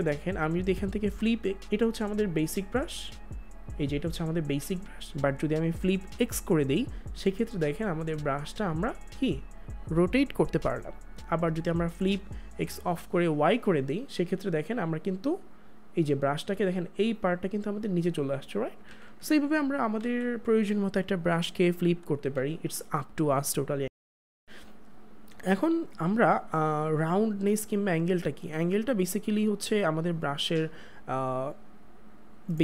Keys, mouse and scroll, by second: 6.2 click, 12.5 click, 18.7 click, 18.8 ctrl+z, 22.3 ctrl+z, 28.5 click, 32.0 click.